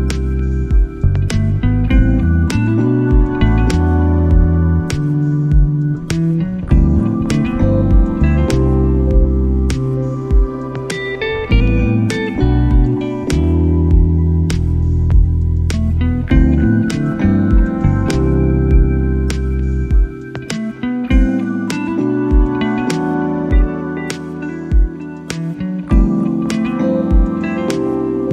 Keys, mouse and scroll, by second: 0.2 click, 0.5 middle click, 0.8 middle click, 2.1 middle click, 2.8 g, 3.4 click, 3.8 a, 4.4 KP_1, 6.1 middle click, 6.6 click, 6.9 middle click, 7.2 ctrl+s, 7.7 middle click, 7.9 middle click, 8.4 middle drag, 8.8 middle click, 9.0 middle click, 10.4 shift+middle click, 10.6 middle click, 10.9 click, 11.7 middle click, 11.8 shift+middle drag, 12.3 shift+middle click, 12.8 click, 13.4 ctrl+r, 15.2 shift+middle click, 15.6 ctrl+r, 16.3 shift+middle click, 17.4 middle click, 17.6 middle click, 17.8 shift+middle click, 18.1 ctrl+r, 19.3 middle click, 19.5 ctrl+r, 21.3 middle click, 21.6 middle click, 21.8 shift+middle click, 21.9 middle click, 22.1 shift+middle click, 22.3 middle click, 22.7 ctrl+r, 24.2 middle click, 24.5 middle click, 24.6 ctrl+r, 25.8 middle click, 26.1 middle click, 26.2 shift+middle click, 26.4 middle click, 26.6 shift+middle click, 27.7 middle click.